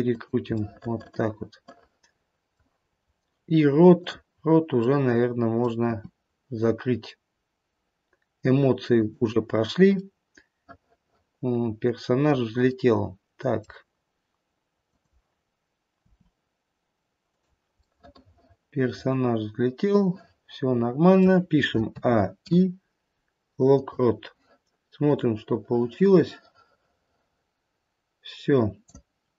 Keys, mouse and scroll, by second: 0.5 middle click, 2.8-3.4 scroll up 1, 3.4-3.9 scroll up 2, 3.9 click, 4.6-5.5 scroll down 2, 5.5 middle click, 5.8 r, 10.1 middle click, 11.0-13.3 middle click, 13.0 middle click, 14.8 click, 16.1 r, 18.0 middle click, 18.1 middle click, 19.2 middle click, 19.8 middle click, 20.2 middle click, 21.8 a, 22.3 i, 25.1 click.